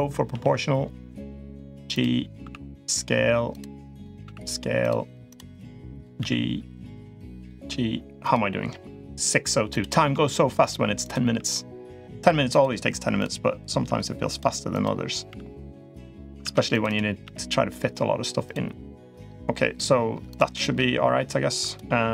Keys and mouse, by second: 0.0 g, 1.7 click, 2.2 s, 3.7 click, 4.0 s, 5.0 click, 5.7 click, 5.9 g, 7.1 click, 7.3 g, 9.5 click, 9.9 g, 10.8 click, 11.0 g, 13.0 click, 13.5 g, 14.5 click, 15.0 g, 16.2 ctrl+r, 17.0 g, 20.1 click, 21.4 click.